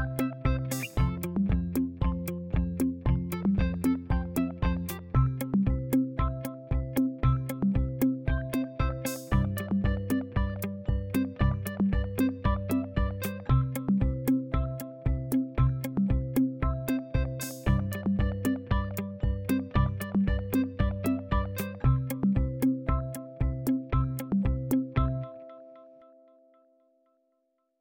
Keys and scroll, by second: 8.6 ctrl+z.